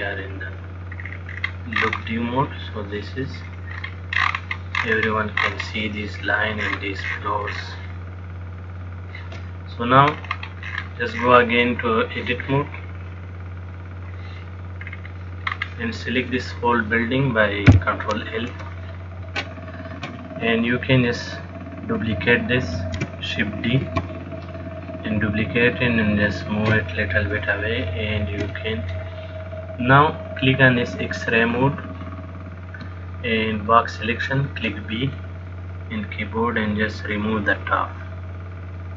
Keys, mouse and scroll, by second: 0.7 click, 1.2-1.7 scroll down 3, 1.6-2.7 scroll up 12, 2.7 middle click, 3.6-4.2 scroll down 3, 4.0-6.8 scroll up 19, 6.8-8.9 scroll down 22, 8.9 click, 10.3-10.9 scroll up 6, 10.9-11.4 scroll down 1, 11.4-11.8 scroll down 13, 13.4 click, 15.3-15.7 scroll down 1, 15.7-16.5 scroll up 3, 16.5 click, 17.9 ctrl+l, 23.3 shift+d, 24.8 click, 27.7 shift+middle click, 29.0 click, 31.8 click, 32.6 click, 34.6 b.